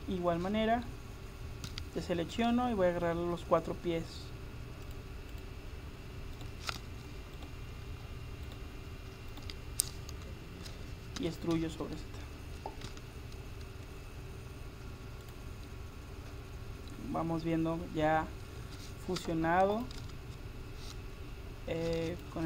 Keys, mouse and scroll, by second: 1.7 a, 4.9-9.1 drag, 6.4-11.2 right drag, 9.9-11.2 drag, 10.9-11.9 middle drag, 11.3 e, 15.7-16.9 middle drag, 17.3 middle click, 19.2 Tab, 20.0 Tab, 20.0-22.4 drag.